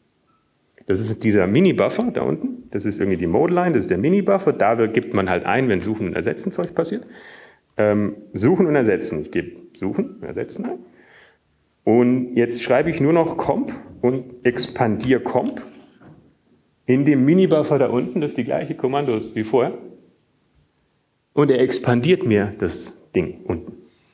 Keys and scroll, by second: 10.9 alt+%, 15.7-16.5 typing, 18.0 alt+/, 20.5 alt+/, 21.6 alt+/, 22.7 alt+/.